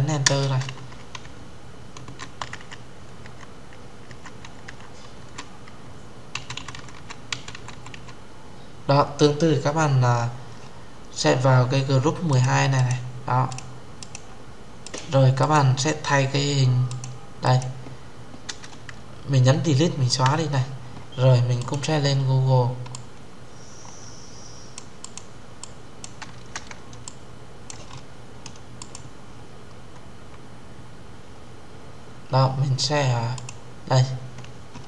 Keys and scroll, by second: 19.9 Delete.